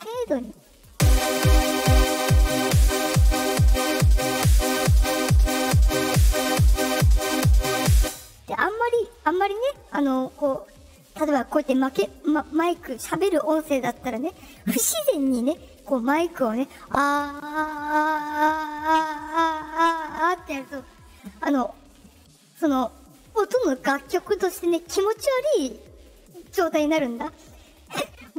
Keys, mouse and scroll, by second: 0.6-4.3 drag, 0.8 space, 5.1-7.8 drag, 7.9 space, 8.9-9.3 drag.